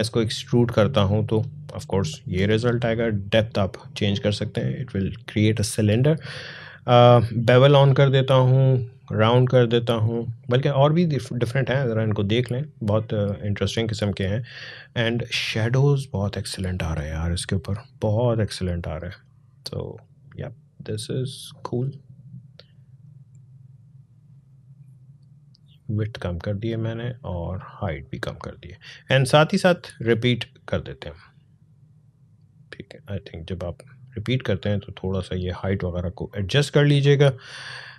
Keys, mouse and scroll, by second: 2.7-6.3 drag, 7.3 click, 17.2-36.8 drag, 36.8-37.9 drag.